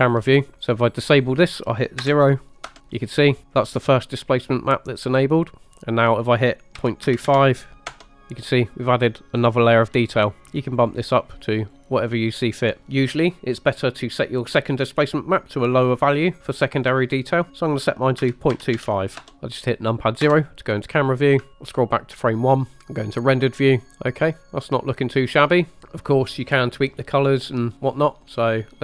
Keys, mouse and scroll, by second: 1.2-2.8 drag, 3.8-5.5 drag, 5.5 typing, 6.1-8.0 drag, 11.0 click, 11.6 click, 17.5-19.3 drag, 19.3 scroll down 2, 20.3 KP_0, 21.1 scroll down 2, 21.5 shift+middle click, 21.5 scroll up 1, 21.9 drag, 22.9-23.4 scroll down 1, 24.3 scroll up 1, 27.4 click, 27.6 middle click, 28.0 scroll down 1, 28.2 middle click, 28.6 middle click.